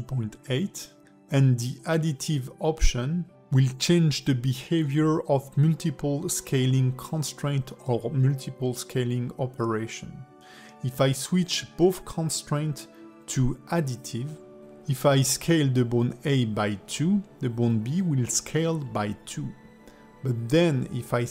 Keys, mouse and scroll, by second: 0.4 s, 1.5 click, 2.1 s, 4.3 click, 5.0 s, 6.8 click, 7.2 click, 7.8 s, 8.8 alt+middle click, 9.3 click, 9.7 alt+s, 10.3 click, 10.7 alt+s, 12.0 click, 13.9 click, 14.8 shift+click, 15.2 ctrl+shift+c, 18.1-19.1 scroll down 7, 19.1 click, 19.8 click, 20.7 KP_1.